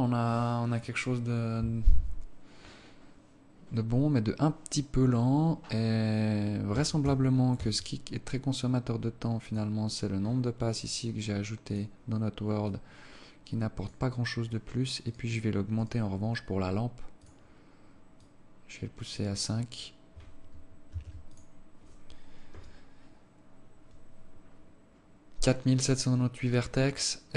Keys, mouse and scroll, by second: 8.1 Escape, 9.9 click, 10.7-11.4 scroll down 15, 12.1 click, 13.1 click, 15.5 right click, 16.3 right click, 17.7 click, 18.7 click, 21.5 ctrl+s.